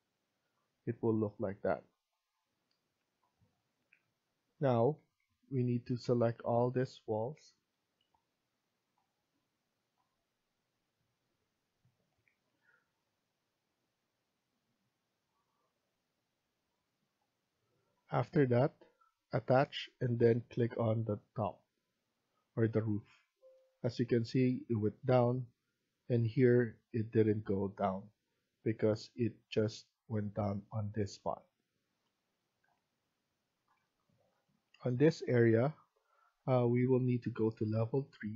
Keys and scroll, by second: 4.6 Escape, 4.8 Escape, 23.0 Escape.